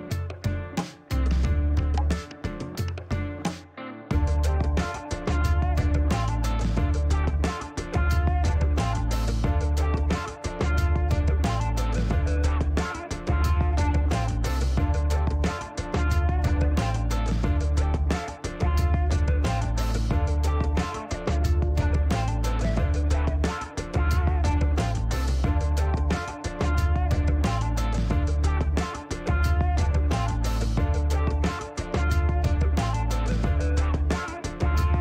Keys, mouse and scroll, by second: 4.4 click, 5.6 click, 7.9 click, 9.4 middle click, 11.1 click, 12.2 KP_1, 12.3 KP_3, 12.9 KP_Enter, 15.3 click, 18.0 click, 19.6 click, 21.0 click, 21.4 right click, 22.2 click, 23.2 click, 25.2 click, 30.0 click, 31.1 scroll down 2, 31.5 middle click, 32.0 scroll up 2, 34.3 click.